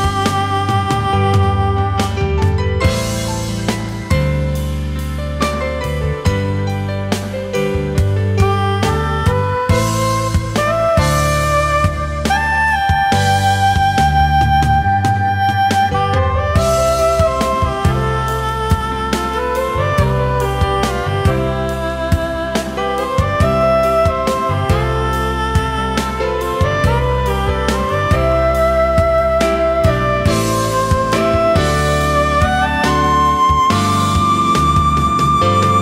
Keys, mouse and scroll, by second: 20.3 Caps_Lock, 21.0 f, 29.7 alt+shift+click.